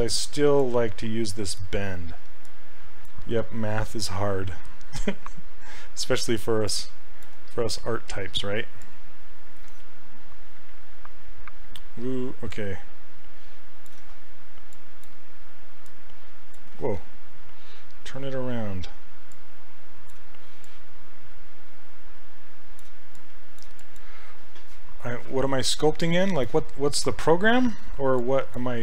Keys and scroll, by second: 5.0 w, 7.6 ctrl+z, 16.8 ctrl+z.